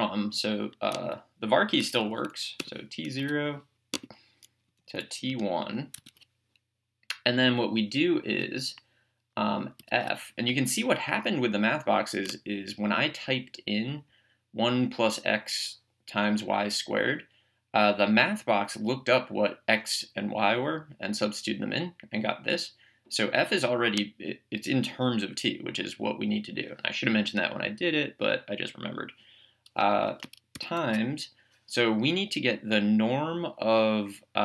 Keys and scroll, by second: 2.1 Down, 2.6 Return, 3.2 Tab, 4.7 Down, 5.3 Return, 6.0 Tab, 9.8 f.